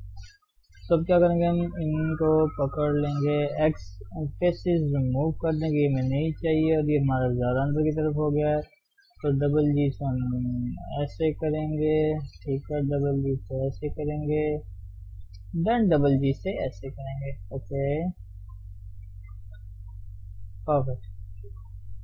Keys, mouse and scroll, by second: 0.8 3, 1.8 click, 2.6 ctrl+click, 4.4 x, 4.7-6.2 middle drag, 6.2 1, 6.8 click, 7.0 middle click, 7.8 shift+click, 8.1-9.2 middle drag, 9.2 g, 12.0 click, 12.8 g, 15.1 click, 15.5 g, 17.4 click, 17.8 g, 19.5 click, 19.7 g, 20.7-22.0 middle drag.